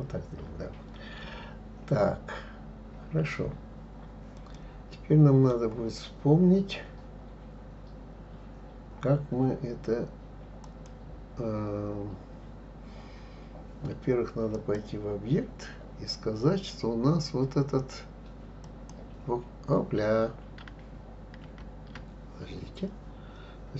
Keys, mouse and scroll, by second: 3.6-4.5 scroll down 1, 4.5-6.1 middle drag, 6.1-8.1 scroll up 2, 10.6 click, 14.5-17.6 drag, 21.4 ctrl+z.